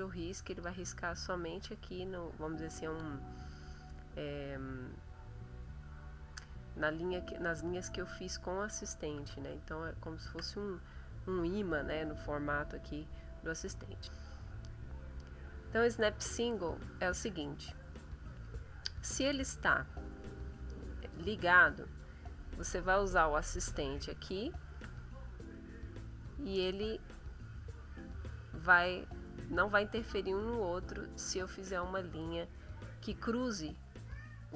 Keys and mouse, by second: 0.3 click, 9.3 ctrl+z, 20.2 click, 21.0 click, 23.8 ctrl+z, 25.4 click, 27.2-28.6 drag, 29.0 click, 30.2 click, 31.6 click, 34.1 click.